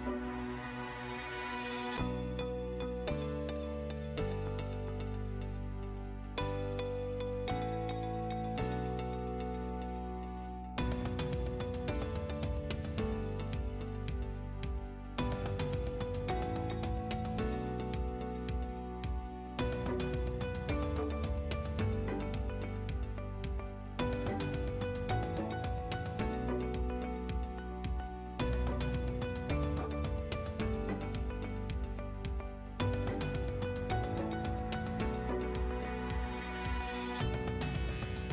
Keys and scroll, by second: 0.2-1.2 typing, 2.1 Escape, 2.7 p, 3.0 l, 3.9 space, 15.1 space, 17.3-18.7 typing, 21.6 5, 22.2 0, 33.0 Return.